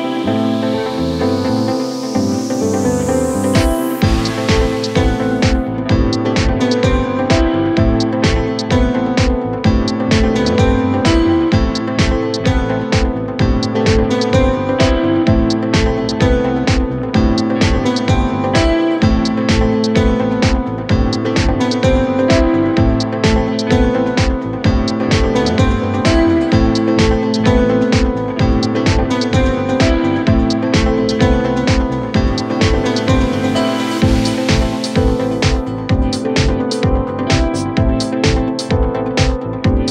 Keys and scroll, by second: 0.5 0, 0.6 Return, 2.7 ctrl+d, 2.7 Escape, 3.9 1, 4.1 Return, 5.7 F1, 8.5 p, 10.0-11.1 typing, 13.1-14.2 typing, 15.1 ctrl+d, 21.8-23.7 typing, 25.6 ctrl+d, 25.6 Escape, 25.9 F1, 27.6 4, 29.6 ., 30.3 F1, 30.4 F2, 33.2 ctrl+z, 36.8 End, 37.1 Delete.